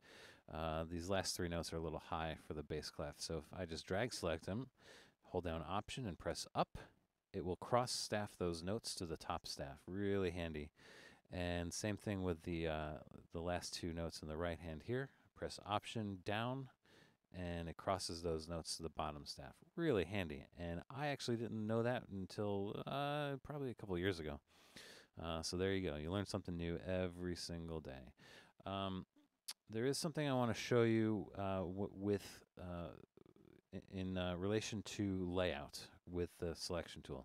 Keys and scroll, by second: 6.3 alt+Up, 16.3 alt+Down, 29.6 super+-.